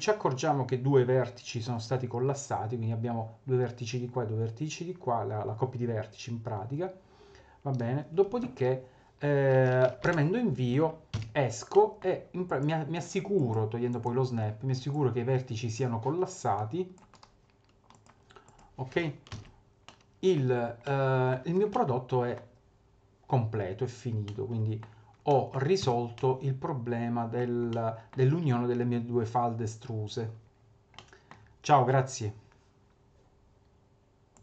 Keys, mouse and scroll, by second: 10.0 Return, 11.1 a, 11.7 middle click, 12.4 click, 13.4 click, 13.9 click, 14.9 click, 17.1 right click, 19.3 ctrl+z, 19.9 middle click, 20.5-20.8 scroll down 2, 20.8 middle click, 21.7 middle click, 24.2 middle click, 25.3 middle click, 25.8 Tab, 26.1 middle click, 27.7 middle click, 30.5-30.9 scroll down 2, 30.9 middle click.